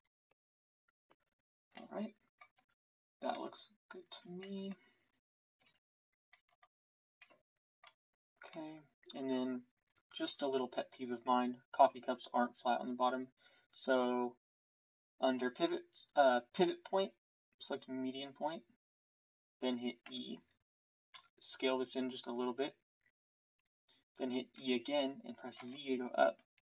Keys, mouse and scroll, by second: 0.0 e, 2.5 Tab, 5.5 Tab.